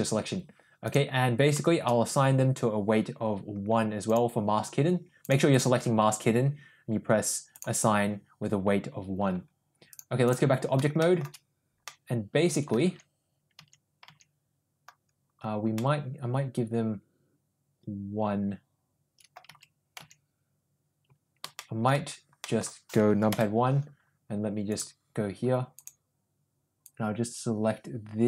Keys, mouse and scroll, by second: 0.9 click, 5.3 click, 5.6 click, 7.8 click, 10.0-10.5 drag, 11.0 shift+middle drag, 11.9-12.7 middle drag, 13.1 Tab, 13.8 Tab, 14.3 Tab, 15.8-19.3 middle drag, 19.7 Tab, 20.2 Tab, 21.6 shift+middle click, 22.4 middle click, 23.3 KP_1, 24.7 click, 25.8 click, 26.8-28.2 drag.